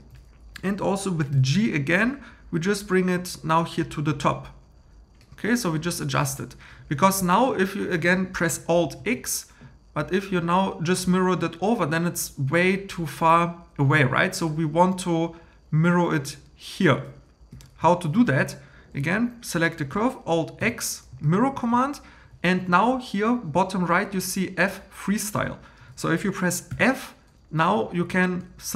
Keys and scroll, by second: 1.3 g, 9.0 alt+x, 17.5 Home, 20.6 alt+x, 26.7 f.